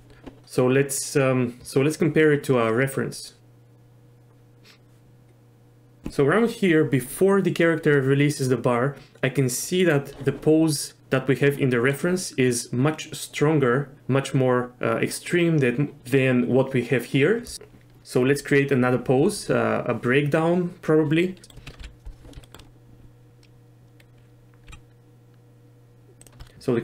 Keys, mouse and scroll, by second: 3.4-6.0 drag, 21.4 middle click, 21.8 KP_3, 22.4 shift+click, 24.7 g.